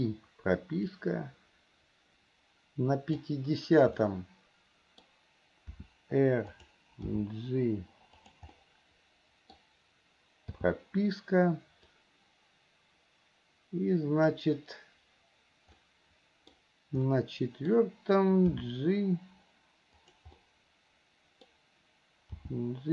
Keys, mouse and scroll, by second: 1.1-3.5 drag, 4.2-5.2 middle drag, 8.9 middle click, 12.1-14.6 drag, 16.0 middle click, 17.3 middle click, 20.6 scroll up 1, 20.6-21.6 middle drag, 21.6 scroll down 1.